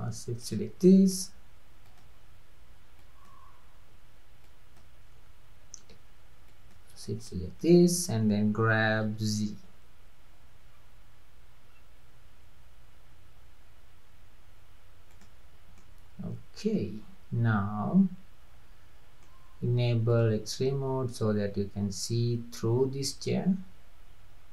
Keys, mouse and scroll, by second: 0.9-1.4 middle drag, 1.9 drag, 3.0 click, 4.4 click, 6.5 shift+click, 7.3-9.1 middle drag, 9.1 g, 15.8-18.8 middle drag, 20.1 click, 20.6-23.5 middle drag.